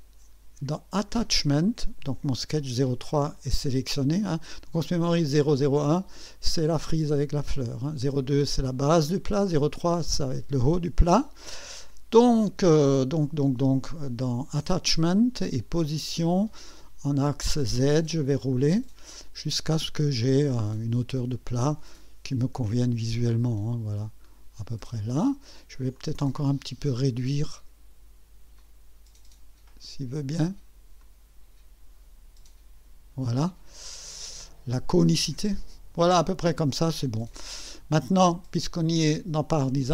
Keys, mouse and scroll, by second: 1.1 click, 15.8 click, 17.0 click, 18.3 scroll up 1, 19.5 scroll up 2, 20.9-21.2 scroll up 2, 21.6 scroll up 2, 22.4-23.6 scroll up 6, 24.2 scroll up 2, 25.9 click, 28.6-29.9 drag, 31.0-33.3 drag, 34.1 click.